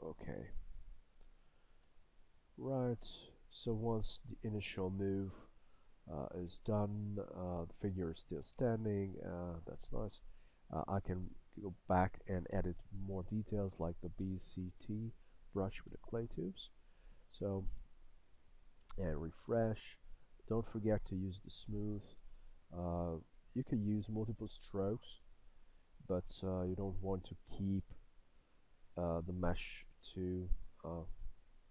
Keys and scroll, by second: 13.5 b, 14.2 c, 14.9 t, 16.1 s.